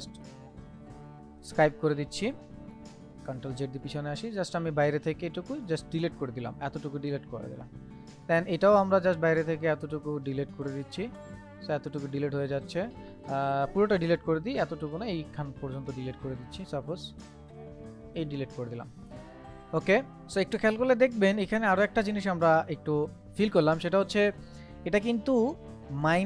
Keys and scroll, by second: 3.0 ctrl+z, 13.7 ctrl+z.